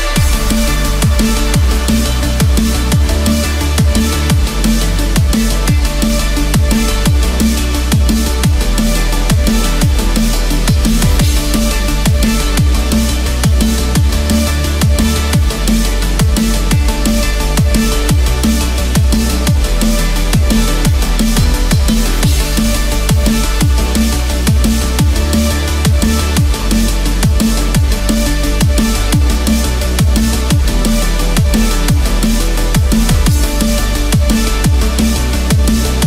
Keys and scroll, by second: 25.2 ctrl+=.